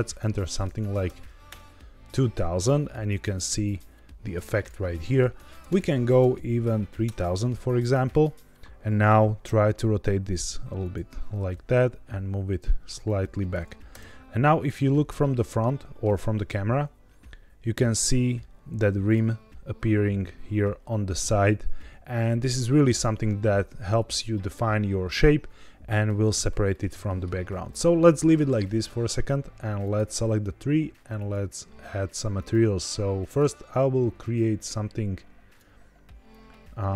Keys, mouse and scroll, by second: 0.6 KP_0, 4.4-7.0 drag, 5.6 KP_0, 7.7-8.2 middle drag, 8.2-8.6 scroll down 2, 8.6 r, 9.0 z, 10.7 click, 11.3 g, 11.5 z, 11.6 z, 13.0 click, 13.8 KP_0, 15.5 shift+middle click, 16.6 r, 16.8 z, 19.0 click, 24.2-26.5 scroll up 1, 26.6-27.2 shift+middle drag, 29.7 click, 31.1 click, 32.3 click, 33.2 click.